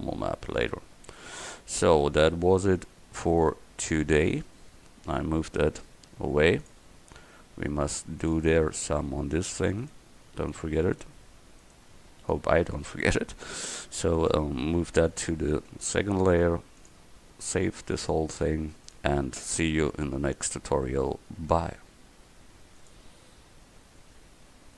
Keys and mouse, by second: 0.8-1.9 middle drag, 2.0 middle click, 2.4-3.4 middle drag, 3.4-5.8 right drag, 5.8 g, 7.2 s, 9.9 right click, 14.2-17.1 right drag, 15.6 m, 18.0-19.0 right drag, 19.1-21.5 drag.